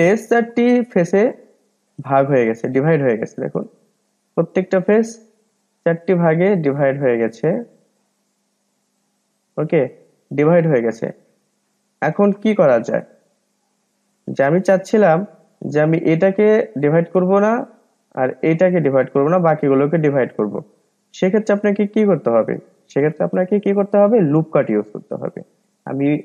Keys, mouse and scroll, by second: 0.0 drag, 0.5 drag, 0.9 click, 1.3 drag, 1.7 drag, 2.0 click, 2.7-3.4 middle drag, 3.4 click, 3.7 click, 4.1 click, 4.5 drag, 4.9-5.7 middle drag, 5.7 drag, 6.5 drag, 6.8 click, 7.1 click, 7.5 click, 7.9-8.7 middle drag, 8.7 drag, 9.0 drag, 9.4 drag, 9.8 click, 10.4-13.3 middle drag, 13.3-14.1 scroll up 2, 14.1-18.9 middle drag, 18.9-20.1 scroll down 2, 20.1-25.1 middle drag, 21.1-21.9 scroll up 3, 21.9-25.1 scroll down 3.